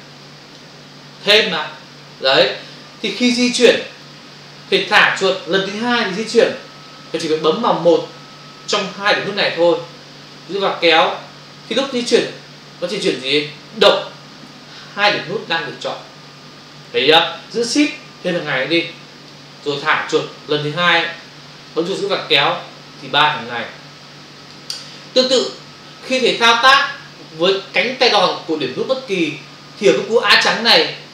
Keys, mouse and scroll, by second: 11.7 click, 18.4 shift+click, 21.6 click.